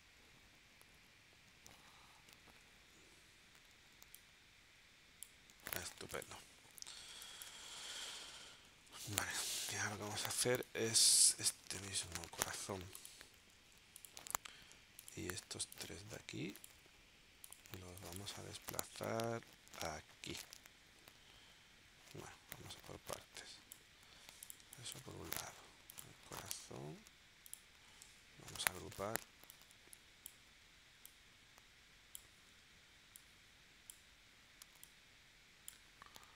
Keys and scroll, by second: 2.4 shift+w, 6.0 v, 7.0 space, 8.6 super+s, 10.4 space, 11.4 v, 17.9 space, 24.6 space, 28.4 super+g.